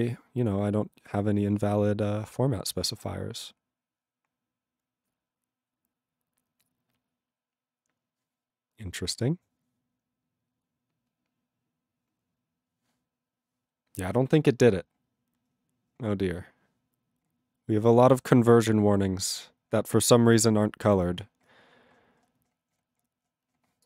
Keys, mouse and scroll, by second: 23.8 ctrl+n.